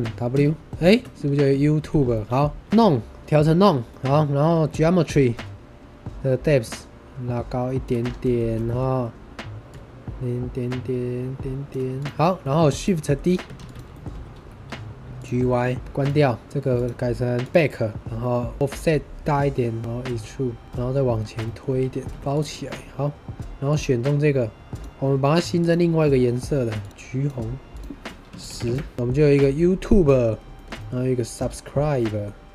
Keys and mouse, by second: 0.3 w, 0.8 shift+middle click, 1.4 Tab, 2.0-2.3 middle drag, 2.6 r, 2.6 x, 2.7 click, 3.8 drag, 6.5-7.8 drag, 8.3 shift+middle drag, 8.5 middle drag, 9.6-11.6 drag, 12.3 click, 12.3 right click, 12.9 middle drag, 13.5 shift+d, 14.0 g, 14.2 y, 15.1 click, 15.7 middle click, 16.7-17.5 middle drag, 18.5-20.8 shift+middle drag, 19.8 ctrl+shift+z, 21.3 middle drag, 21.6 g, 21.9 y, 22.4 middle drag, 24.6 click, 26.8 click, 27.7-28.9 drag, 28.9 middle click, 29.8-30.2 middle drag, 30.5 shift+middle drag, 30.7 middle drag, 31.4-32.2 middle drag.